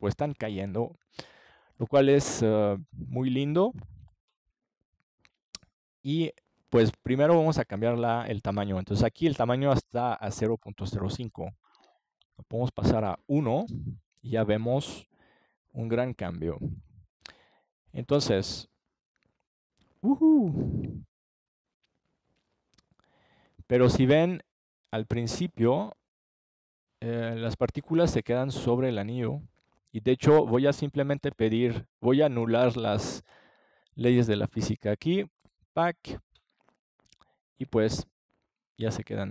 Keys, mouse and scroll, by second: 5.5-7.8 middle drag, 8.7 click, 22.4-24.8 middle drag, 25.9-27.7 drag, 27.7 middle click, 28.2-29.9 drag, 29.9 middle click, 33.7-35.8 middle drag, 35.8 click.